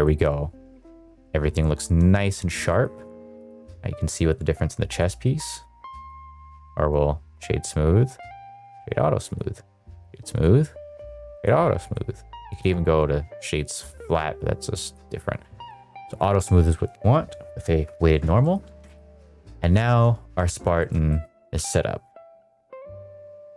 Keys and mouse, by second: 0.7 ctrl+s, 1.0 shift+middle drag, 1.5-1.9 middle drag, 2.0 middle drag, 2.6 middle click, 3.3 click, 4.8 click, 5.9 click, 6.4-7.3 right drag, 8.0-8.7 right drag, 9.2 right click, 10.2-11.4 right drag, 11.7-12.6 right drag, 13.8-14.9 right drag, 15.5-16.3 right drag, 18.3 middle click, 18.7 shift+middle drag, 19.1 click, 20.3 shift+middle drag, 20.7-21.1 shift+middle drag, 21.5 ctrl+s.